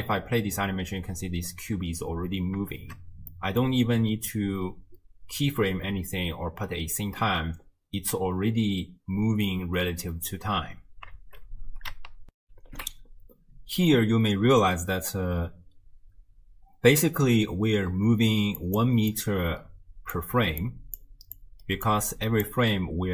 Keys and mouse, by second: 1.2 space, 2.7 shift+space, 3.4 click, 9.5 space, 10.7 space, 12.4 ctrl+alt+shift+w, 12.6 ctrl+alt+shift+q, 18.3-22.6 typing, 18.6 click, 19.1-20.2 drag, 20.6 click, 21.4 click, 22.1 click.